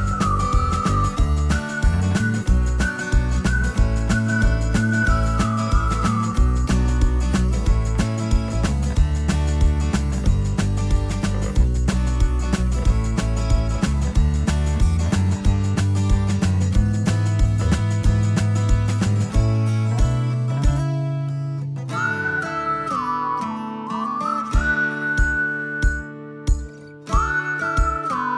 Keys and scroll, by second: 5.7 Escape, 6.9 d.